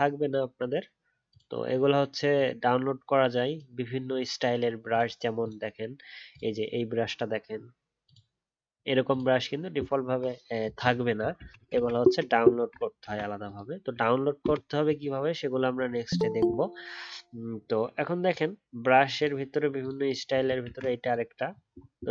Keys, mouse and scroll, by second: 11.3 ctrl+z, 11.7 ctrl+z, 20.6 ctrl+z.